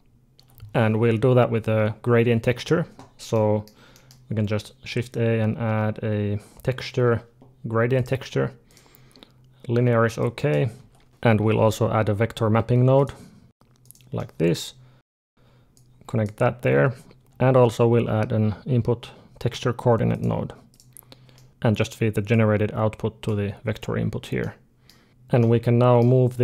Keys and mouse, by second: 3.2-6.0 middle drag, 4.8 shift+a, 10.0 click, 10.5 Delete, 10.5 shift+a, 14.6 middle click, 15.6 click, 17.4 shift+a, 21.2 middle click, 21.5 click, 22.1-24.2 drag, 24.3 middle click, 25.2-26.4 middle drag.